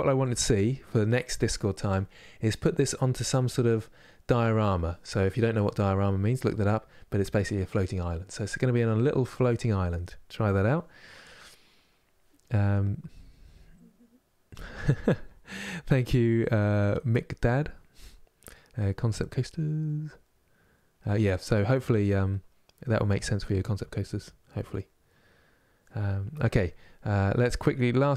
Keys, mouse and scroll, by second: 1.1-2.8 middle drag, 2.8-3.4 scroll down 1, 3.4-28.1 middle drag.